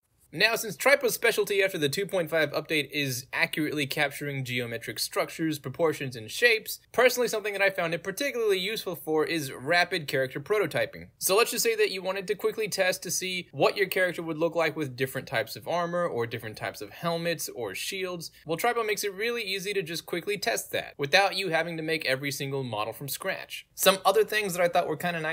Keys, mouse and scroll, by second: 0.4 middle click, 0.4 scroll down 2, 0.5-0.9 drag, 1.1-1.6 drag, 2.0 drag, 2.3 middle drag, 2.3 scroll down 2, 2.6-2.9 drag, 3.1 drag, 3.6-4.2 drag, 4.3 drag, 4.6 scroll down 2, 4.7-6.7 drag, 6.9-7.7 drag, 7.8-11.0 drag, 11.4 middle click, 11.7-12.4 middle drag, 12.6-13.0 middle drag, 13.1 End, 14.1 click, 14.6 click, 15.6 click, 16.5 middle drag, 16.9 click, 17.1 click, 17.5 click, 17.7-18.6 middle drag, 19.2 click, 19.4 click, 20.0-20.9 middle drag, 21.5 click, 21.7 click, 22.1-22.7 middle drag, 23.2 click, 23.5 click, 23.9-25.2 middle drag.